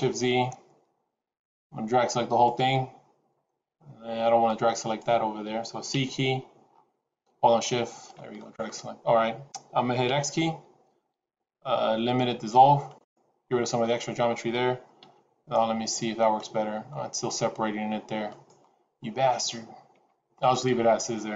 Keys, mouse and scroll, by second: 1.5 click, 4.4 shift+click, 5.8 c, 9.9 x, 14.9 s, 19.8 Tab, 20.7 scroll down 2.